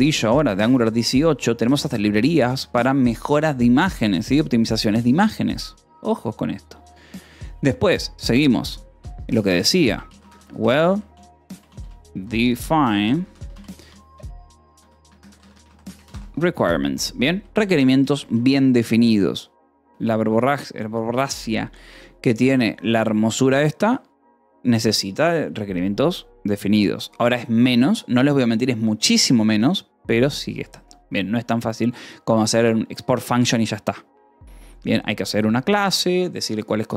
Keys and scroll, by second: 0.0-0.6 typing, 1.0 ctrl+s, 2.4 o, 2.8 :, 3.1 space, 9.1-10.8 typing, 12.0-16.1 typing, 16.6 ctrl+s, 17.2 o, 18.0 :, 18.2 space, 21.0 space.